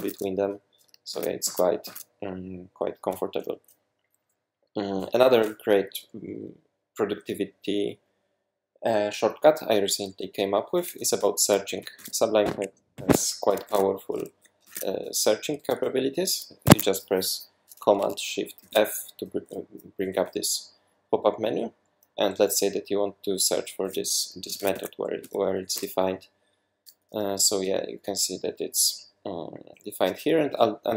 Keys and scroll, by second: 1.1 super+`, 1.4 super+`, 1.8 super+`, 11.9 shift+super+f, 12.9 Escape, 13.7 shift+super+f, 14.6 super+a, 16.6 Escape, 18.6 shift+super+f, 24.3-25.2 typing, 25.7 Return.